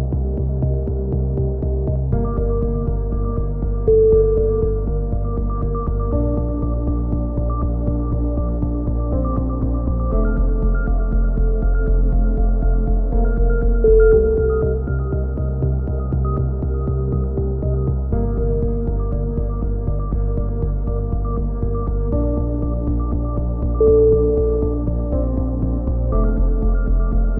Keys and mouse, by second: 0.3-1.4 drag, 1.4 middle click, 1.7 click, 2.5-4.2 middle drag, 5.4 click, 6.0 c, 6.6-7.9 drag, 7.9 ctrl+z, 8.6-9.9 drag, 12.0 a, 13.0 right click, 14.1 right click, 14.8 click, 17.0 z, 17.3 a, 17.7 z, 19.0 middle click, 20.7 a, 20.9 z, 21.1 click, 22.3 KP_3, 22.7 z, 23.1 click, 23.8-25.5 middle drag, 26.5 right click.